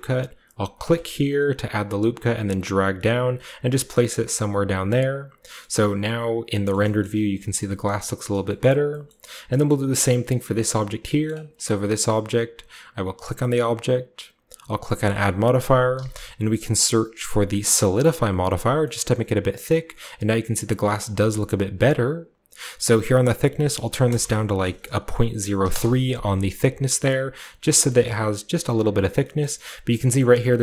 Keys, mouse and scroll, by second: 0.8-2.8 drag, 3.2-5.1 drag, 4.4 z, 5.1-6.4 scroll down 1, 5.6 middle click, 5.6 z, 6.4-7.0 scroll down 1, 6.7 shift+middle click, 7.0-8.4 shift+middle drag, 7.0-7.9 shift+scroll up 2, 7.3 Tab, 7.9-9.4 shift+scroll down 3, 8.6 shift+middle drag, 9.0-9.4 shift+middle drag, 9.6-10.7 shift+middle drag, 10.7-12.4 shift+right drag, 14.6 click, 15.9 typing, 17.6 click, 21.3-22.6 shift+scroll down 2, 21.5-23.2 shift+middle drag, 22.6-23.2 shift+scroll down 1, 23.2-25.2 drag, 24.0 typing, 25.5 3, 25.6 Return, 27.4-27.8 middle drag, 27.5 z, 28.0-29.2 shift+middle drag, 28.1-29.0 scroll up 1, 29.0 scroll down 1, 29.4 shift+middle drag, 29.6-29.9 shift+middle drag, 29.6-30.6 scroll up 2, 30.1-30.6 middle drag.